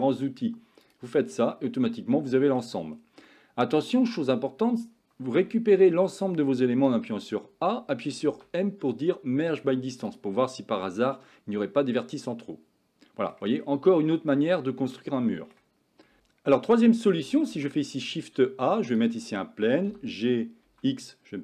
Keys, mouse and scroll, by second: 1.6-2.7 middle drag, 3.3 middle click, 5.4 a, 5.8 a, 8.3 m, 10.9-13.4 middle drag, 14.0 shift+middle click, 14.6 middle click, 15.2 shift+middle click, 16.2 Tab, 17.3 shift+x, 17.6 shift+a, 19.9 g.